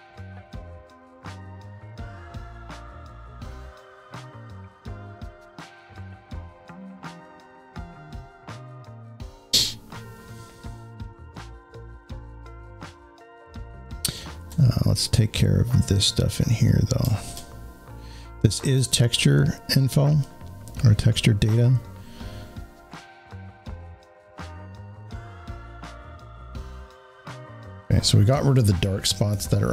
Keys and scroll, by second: 25.7 z, 27.5 space.